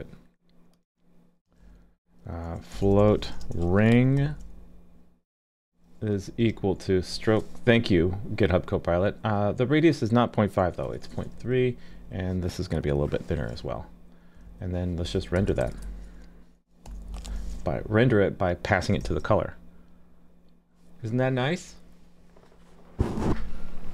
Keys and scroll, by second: 19.0 super+s.